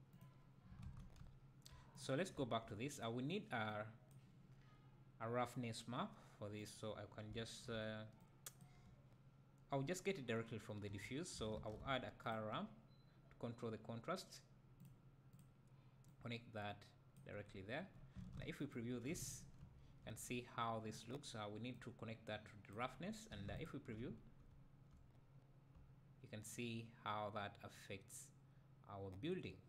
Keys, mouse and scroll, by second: 0.0 click, 0.1 click, 1.2 `, 2.0 click, 2.4 `, 3.7-13.4 drag, 16.1 click, 18.2 click, 19.6 `, 20.2 scroll up 2, 21.7-24.2 drag, 24.2 middle click, 24.2-24.5 scroll down 2, 24.5 `, 25.3 middle click, 25.3-25.8 scroll up 2, 25.8 `, 26.7-28.0 middle drag.